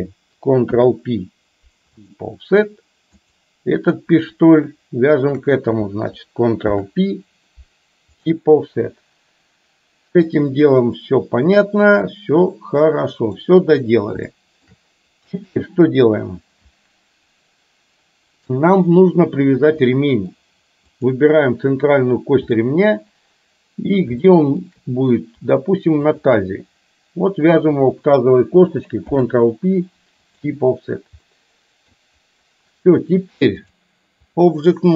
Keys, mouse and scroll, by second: 0.7 ctrl+p, 3.2 click, 5.3 shift+click, 6.7 ctrl+p, 11.0-13.5 middle drag, 14.4 shift+middle click, 20.0 middle click, 21.0 click, 22.7-24.0 middle drag, 24.3 shift+middle click, 26.0 shift+click, 29.2 ctrl+p, 31.4 middle click, 33.8-34.7 drag.